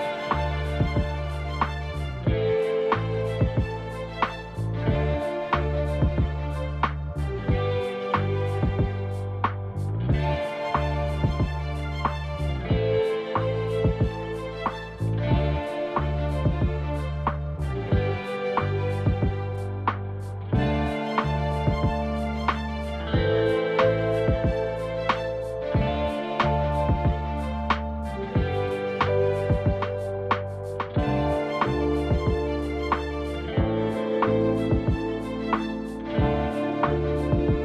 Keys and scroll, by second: 4.3 0, 10.2 ctrl+shift+c, 11.2-13.6 typing, 14.7 Return, 19.1 s, 20.6 Return, 25.6 l, 30.2 1, 31.9-32.8 typing, 33.0 Return.